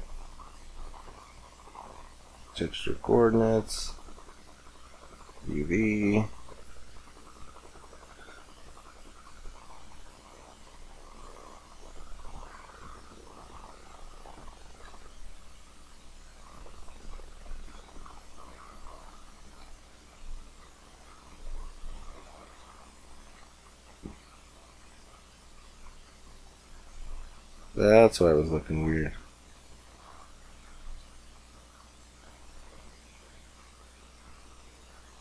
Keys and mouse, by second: 9.3 middle click, 9.8-11.1 middle drag.